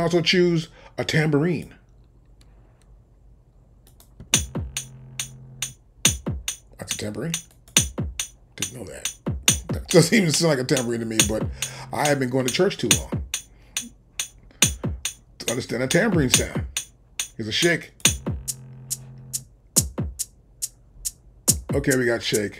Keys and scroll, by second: 4.2 space.